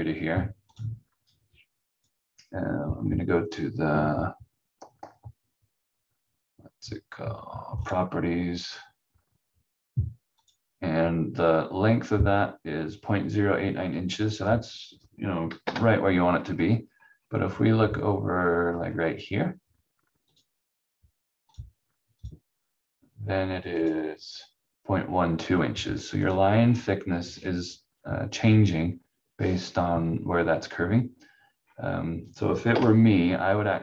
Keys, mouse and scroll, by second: 7.8 click, 15.6 Delete, 16.4-17.9 scroll down 1, 17.9-19.9 scroll up 1, 20.3 click, 23.7 click, 26.6-30.1 scroll down 1, 31.6-32.7 scroll up 1, 32.7 Delete.